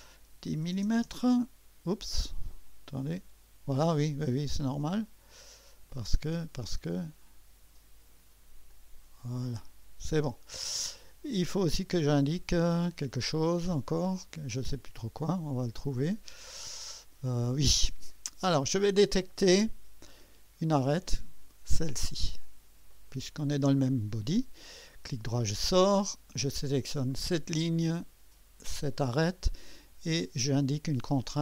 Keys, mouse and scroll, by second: 0.3-1.2 typing, 3.0 Return, 5.9-6.5 drag, 8.7-10.0 drag, 12.9 click, 15.2-17.9 drag, 15.2 typing, 20.9 click, 22.9 click, 27.1 click, 28.7 click.